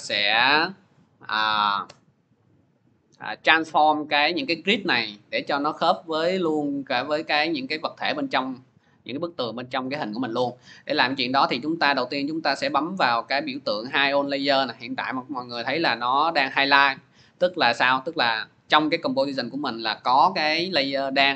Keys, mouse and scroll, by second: 3.8 middle click.